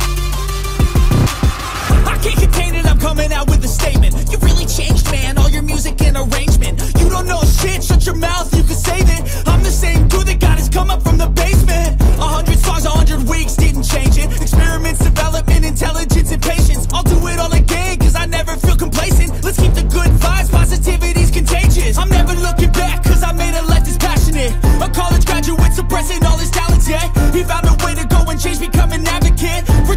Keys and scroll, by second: 5.6 x, 7.5 x, 8.3 x.